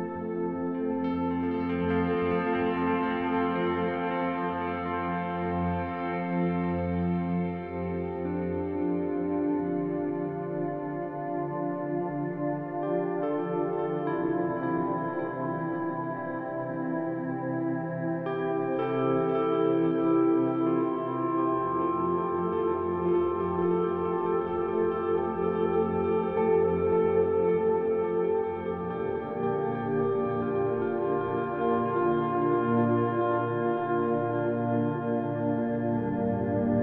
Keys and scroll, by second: 1.1-1.9 typing, 4.4 ctrl+alt+1, 4.6-5.8 typing, 11.1 z, 12.8 z, 14.1 b, 18.6 e, 20.1 e, 20.2 ctrl+alt+1, 20.4 ctrl+alt+1, 20.4 b, 28.0 b, 33.7 z, 35.1 e, 36.5 ctrl+alt+1, 36.7 ctrl+alt+1, 36.7 b.